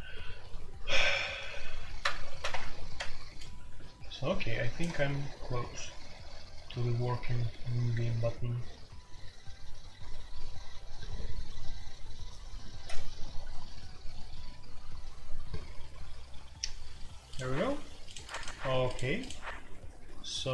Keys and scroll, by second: 1.4 typing, 2.3 alt+p, 2.5 Return.